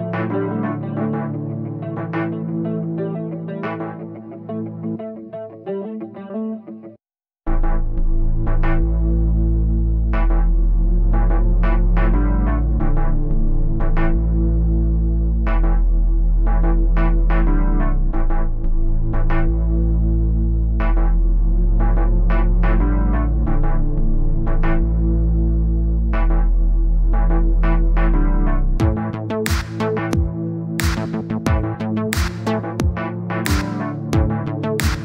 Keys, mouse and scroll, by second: 0.3 middle click, 1.2-2.4 drag, 2.4 middle click, 2.7 click, 2.9-5.5 middle drag, 5.9-7.5 drag, 7.5 middle click, 8.5-9.9 drag, 9.9 middle click, 10.4 click, 11.2 middle click, 11.7 click, 12.2-13.3 middle drag, 13.3-14.5 drag, 15.1-16.3 drag, 16.7 click, 17.3 click, 17.6 click, 17.9-18.9 drag, 18.9 middle click, 19.3 click, 19.7 middle click, 20.1 click, 21.0 middle click, 21.4 click, 22.1 middle click, 22.6 click, 22.8 middle click, 23.5 click, 24.2 middle click, 24.8 click, 25.0 scroll down 1, 25.0-26.2 middle drag, 26.6-26.9 scroll up 2, 26.9-28.9 drag, 28.9-29.9 middle drag, 29.9 scroll up 1, 30.2 click, 30.8-31.7 scroll up 1, 31.7-32.1 scroll down 1, 32.1-32.9 scroll up 2, 32.9 scroll up 2, 33.1-34.5 scroll down 10, 34.5-35.0 scroll up 1.